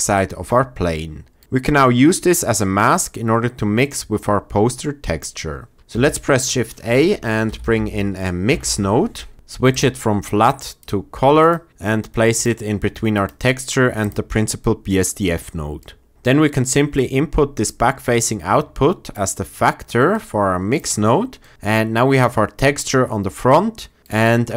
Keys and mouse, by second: 3.7 click, 5.9 shift+a, 9.8-10.8 drag, 13.1 click, 13.9 click, 20.1 click.